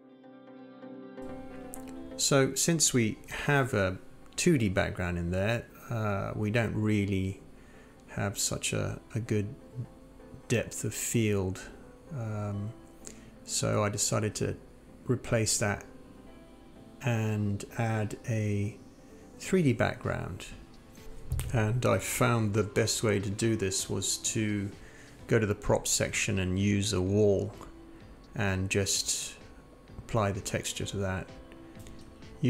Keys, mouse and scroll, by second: 0.1 click, 0.4 click, 0.5 click.